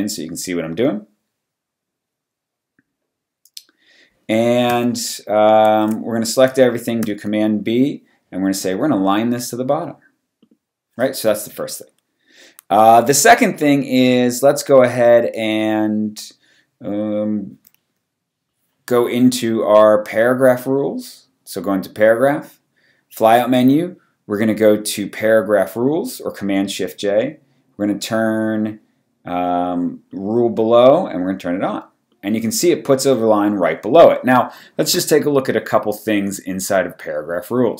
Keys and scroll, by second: 5.7 super+0, 7.0 super+b.